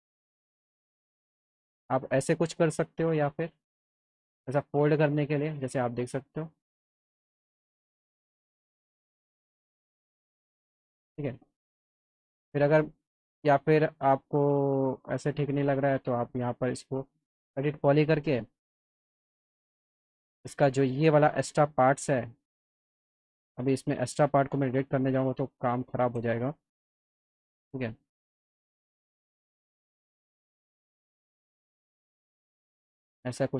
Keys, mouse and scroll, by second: 0.1 click, 1.0 click, 2.7 alt+middle click, 3.0 click, 3.6 alt+middle click, 4.2 alt+middle click, 6.7 alt+middle click, 7.1 click, 8.0-9.0 alt+middle drag, 9.6 alt+middle click, 11.8 ctrl+z, 13.1 click, 14.2-15.4 drag, 15.6 alt+middle click, 16.6 click, 17.7 e, 18.6 click, 20.1 click, 20.6 alt+middle click, 21.3 click, 23.3 click, 24.3 click, 25.2 alt+click, 27.7 alt+middle click, 29.1 click, 31.8 click, 32.3 alt+middle click, 32.7 click.